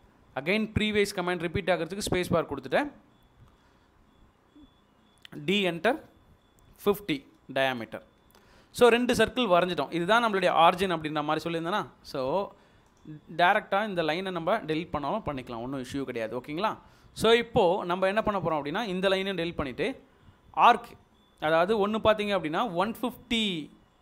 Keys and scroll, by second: 0.2 space, 5.2 d, 5.8 space, 7.2 typing, 7.7 Return, 14.0 Delete, 19.2 Delete.